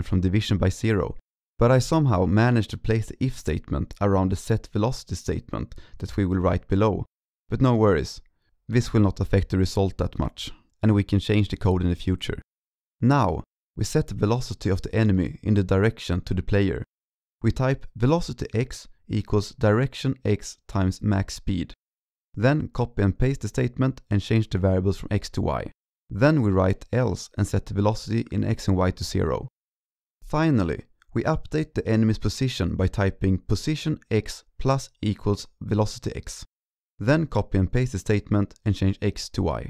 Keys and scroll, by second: 9.2 ctrl+Right, 11.0 ctrl+alt+7, 11.6 ctrl+Right, 11.6 ctrl+Right, 11.7 ctrl+Right, 11.8 ctrl+Right, 22.4 ctrl+shift+Right, 22.5 ctrl+shift+Right, 22.8 ctrl+shift+Right, 22.9 ctrl+c, 23.0 ctrl+v, 23.1 ctrl+v, 23.6 ctrl+Left, 23.7 ctrl+Left, 24.5 ctrl+Left, 24.6 ctrl+Left, 25.7 ctrl+s, 26.5 ctrl+alt+7, 29.6 ctrl+s, 30.4 ctrl+Right, 30.4 ctrl+Right, 30.4 ctrl+Right, 30.5 ctrl+Right, 37.3 ctrl+shift+Right, 37.5 ctrl+shift+Right, 37.7 ctrl+shift+Right, 37.9 ctrl+c, 38.1 ctrl+v, 38.2 ctrl+v, 38.4 ctrl+Left, 39.1 ctrl+Left, 39.2 ctrl+Left.